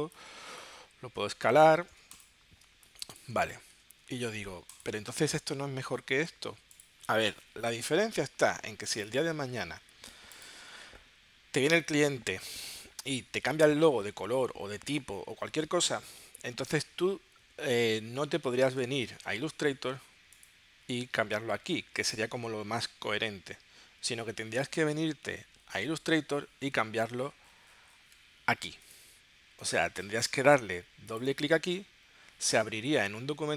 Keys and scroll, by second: 2.7 space, 3.7 w, 16.8 w, 18.7 super+Tab.